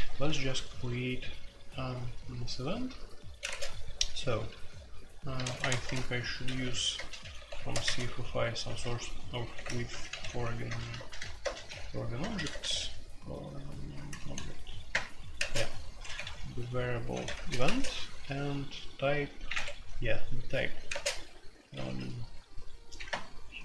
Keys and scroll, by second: 3.4 space, 3.5 Tab, 4.5-17.6 typing, 19.5 Escape, 20.6-21.8 typing, 23.0-23.6 typing.